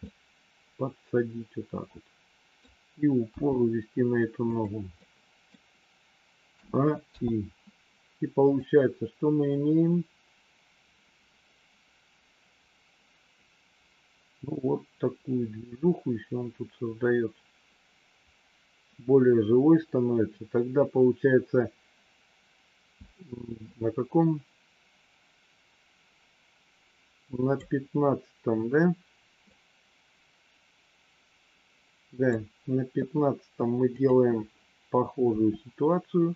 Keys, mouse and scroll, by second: 0.1-2.6 middle drag, 3.3 g, 4.9 middle click, 7.1 a, 7.1 i, 8.6-27.6 drag, 29.4 click, 33.8 click, 35.3 g.